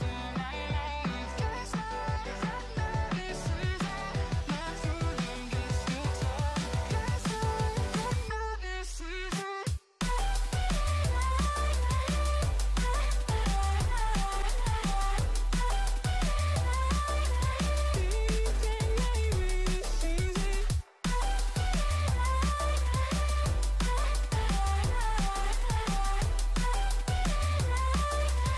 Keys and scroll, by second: 4.6 ctrl+0, 16.3 ctrl+=, 17.5 ctrl+0, 24.0 ctrl+z.